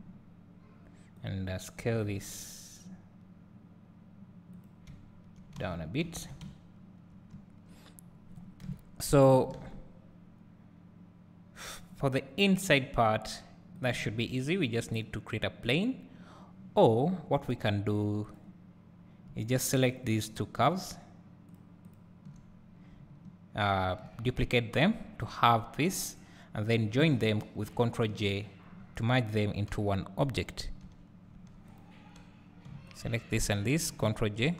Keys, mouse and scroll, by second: 0.2-1.3 scroll down 1, 1.3 click, 1.8 s, 4.5-5.6 drag, 5.6 alt+a, 8.7 KP_7, 18.3 click, 20.0 shift+click, 20.8 shift+click, 21.5 shift+click, 21.9 shift+click, 23.9 shift+d, 26.0-30.8 shift+drag, 30.8 Tab, 31.8 click, 33.4 shift+click, 34.4 ctrl+j.